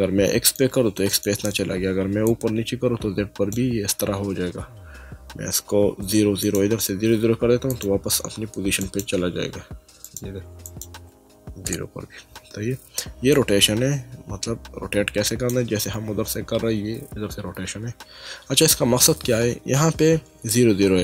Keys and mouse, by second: 0.6 click, 2.2 click, 6.4 click, 7.1 0, 7.7 click, 8.8 click, 9.5 0, 10.0 click, 11.0 0, 13.3 click, 17.6 ctrl+z.